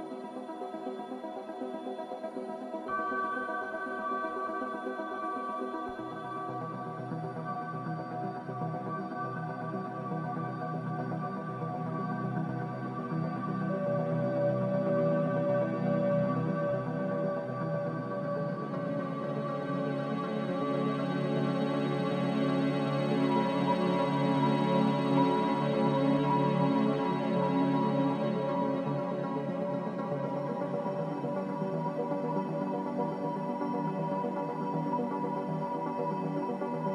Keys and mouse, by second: 0.7-4.6 middle drag, 5.0 click, 6.6-7.6 drag, 7.6 middle click, 10.4-11.6 drag, 12.5 click, 13.0-14.1 drag, 16.6-17.1 middle drag, 18.5-19.8 middle drag, 20.2 middle click, 20.7-22.8 middle drag, 22.8-25.3 drag, 22.8-25.3 right drag, 25.3-27.5 middle drag, 28.4-29.2 middle drag, 30.1-30.6 middle drag, 31.8-32.3 shift+middle drag, 34.4-34.9 shift+middle drag.